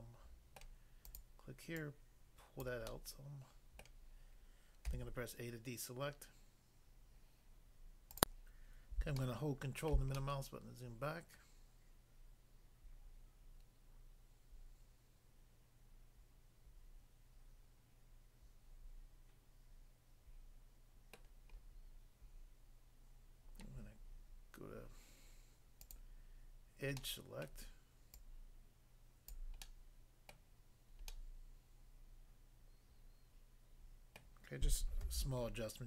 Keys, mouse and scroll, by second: 0.6 middle click, 1.1 click, 1.2 click, 1.8 click, 2.7 click, 2.9 middle click, 3.8 middle click, 4.8 a, 8.2 click, 9.2 ctrl+middle click, 21.1 middle click, 21.6-22.4 scroll up 1, 25.8 click, 25.9 click, 27.0 middle click, 27.4 middle click, 28.2 click, 29.3 click, 29.6 middle click, 30.3 middle click, 31.0 middle click, 34.2 middle click, 35.0 a, 35.5-35.8 scroll down 1.